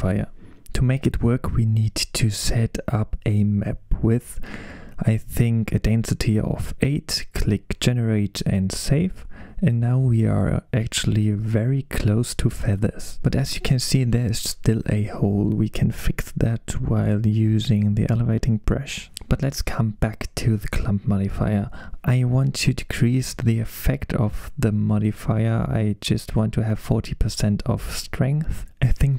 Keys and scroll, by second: 7.5-8.4 typing, 7.6 Return, 23.2-24.4 typing.